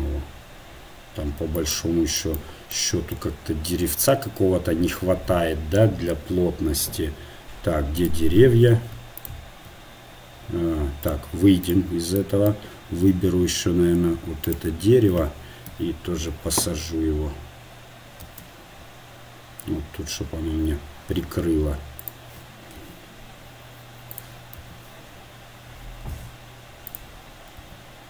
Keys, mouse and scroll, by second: 1.9-4.8 drag, 8.5-11.1 drag, 12.2-14.8 drag, 14.8-18.1 right drag, 15.7 KP_7, 18.3 shift+d, 22.9 r, 26.2 s, 27.6 s.